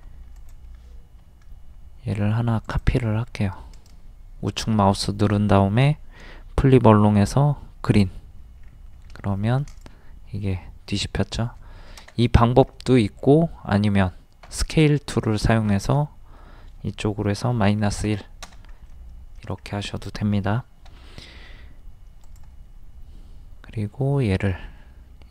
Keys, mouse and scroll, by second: 0.3 ctrl+click, 3.3 scroll up 1, 3.7 right click, 7.9 click, 8.6 scroll up 1, 9.7 click, 12.7-14.4 middle drag, 14.4 s, 15.7 click, 17.7 KP_1, 18.9 middle click, 19.6-20.2 scroll up 1, 20.9 m, 22.2 click, 24.5-25.1 shift+scroll down 1.